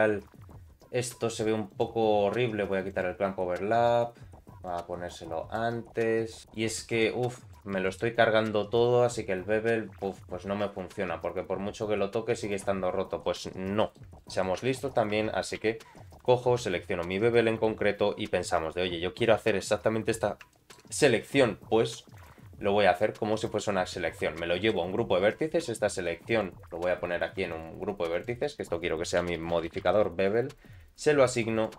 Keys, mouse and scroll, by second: 1.7 click, 2.1-3.0 scroll down 2, 3.0 click, 4.7 click, 7.0 middle click, 7.8 alt+middle click, 8.1 middle click, 8.6-9.9 scroll up 2, 9.9 click, 10.8-12.5 shift+drag, 12.8 scroll down 2, 13.2 middle click, 13.8 shift+middle click, 14.2 middle click, 14.7 shift+middle click, 15.2 Tab, 15.6 2, 15.9 click, 17.0 ctrl+click, 19.2 middle click, 20.5 shift+middle click, 22.2 click, 23.0 click, 24.2 middle click, 26.3 click, 27.5 click, 28.3-31.4 drag, 31.5 click.